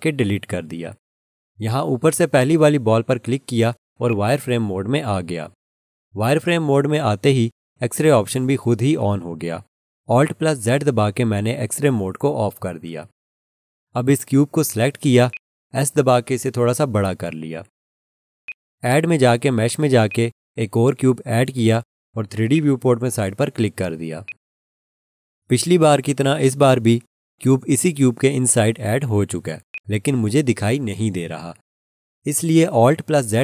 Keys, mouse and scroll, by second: 4.1 click, 11.1 alt+z, 15.3 click, 29.7 alt+click.